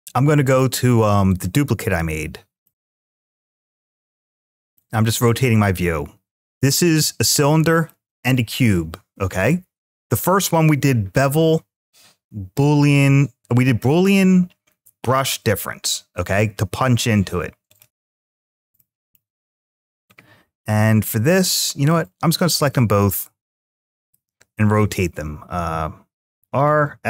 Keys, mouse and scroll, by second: 0.4 drag, 1.1 click, 2.5-4.3 middle drag, 4.6-5.1 shift+middle drag, 5.7-6.7 scroll up 1, 6.7 click, 7.6 click, 17.5 click, 18.6-19.0 middle drag, 19.4-20.0 scroll down 2, 20.6 scroll down 2, 20.9-21.8 middle drag, 22.3 click, 23.8 shift+click, 26.2 ctrl+z, 26.7 x.